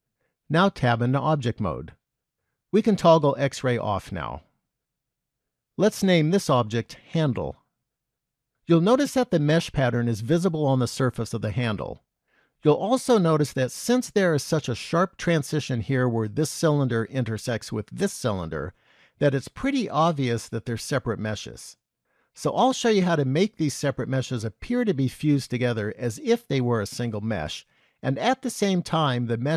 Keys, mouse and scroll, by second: 1.0 Tab, 3.4 click, 5.9 click, 6.1 click.